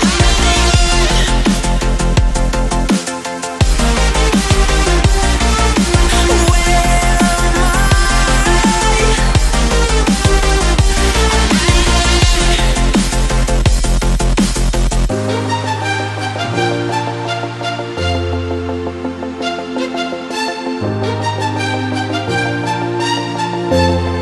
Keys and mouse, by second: 0.0 click, 0.4 Right, 0.6 BackSpace, 2.4 shift+Return, 2.7 ctrl+a, 3.7-6.3 drag, 6.9-7.6 alt+shift+drag, 8.6-10.0 alt+shift+drag, 10.3 Left, 11.2 Up, 12.6 click, 19.1-20.8 alt+shift+drag, 20.9 click, 21.1 space, 21.4 click, 22.0 space, 22.1 click, 22.3 space, 22.8-24.2 drag.